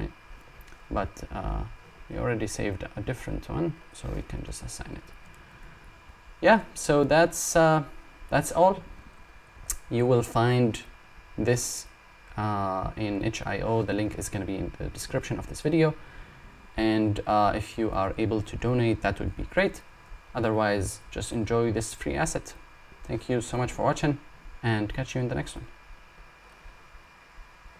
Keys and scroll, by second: 15.6 Num_Lock.